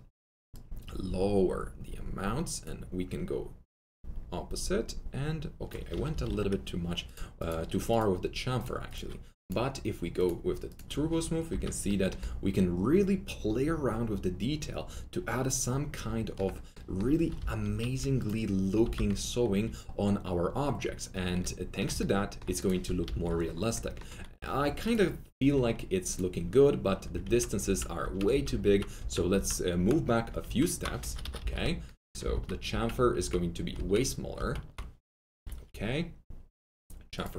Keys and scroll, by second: 6.0 F3, 6.2 F4, 11.2 F3, 11.3 F3, 11.4 F4, 17.3 F3, 17.6 F3, 17.7 F4, 18.7-19.5 typing, 22.8 alt+F3, 23.0 alt+F4, 27.2 ctrl+z, 30.4 ctrl+z, 31.2 F3, 31.4 F4, 32.3 ctrl+z.